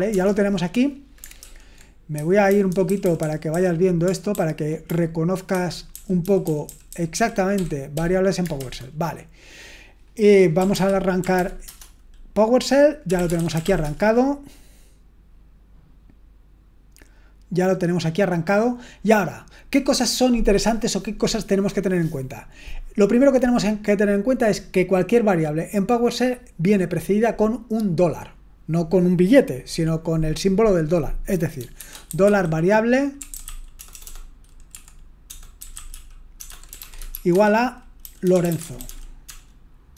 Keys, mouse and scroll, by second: 0.1 BackSpace, 1.4 super+l, 2.1-2.8 typing, 4.0-6.7 typing, 4.3 ctrl+d, 5.6 Escape, 8.5 super+h, 8.8 typing, 10.3-11.8 typing, 12.9-14.1 typing, 31.5-39.9 typing.